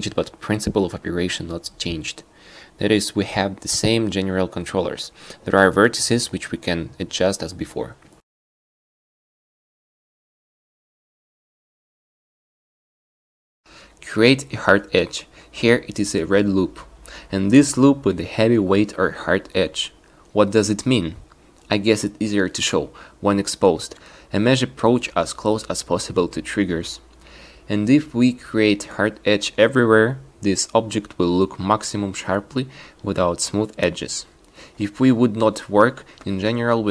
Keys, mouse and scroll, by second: 0.8 shift+e, 9.5 click, 14.5 shift+e, 20.4 q, 25.2 shift+e, 27.8 shift+e, 30.0 shift+e, 31.4 shift+e, 33.5 shift+e, 35.2 shift+e, 36.1 a, 36.2 a, 36.5 shift+e.